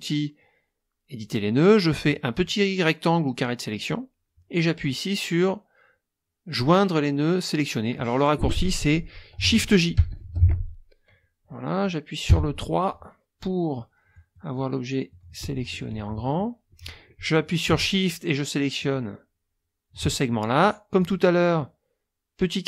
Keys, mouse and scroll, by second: 2.0-4.1 drag, 9.9 shift+j, 12.3 3, 13.7 click, 15.1 click, 16.2 click, 18.8 shift+click, 21.0-22.6 drag.